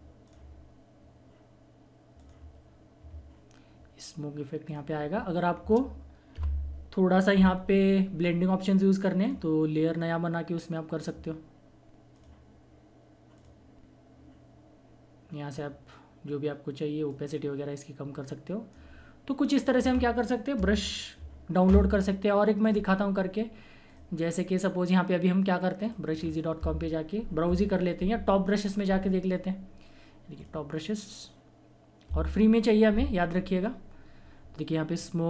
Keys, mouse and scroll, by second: 4.7 click, 6.3 F12, 9.7 click, 17.0-19.5 drag, 20.6 Delete, 22.6 click, 26.1-27.5 scroll up 1, 32.1 click, 33.3 scroll down 1.